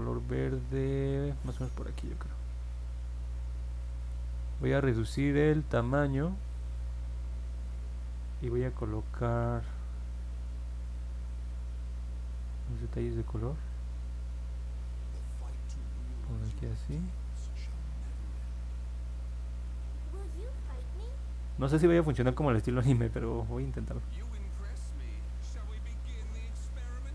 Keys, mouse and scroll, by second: 14.5-27.1 drag.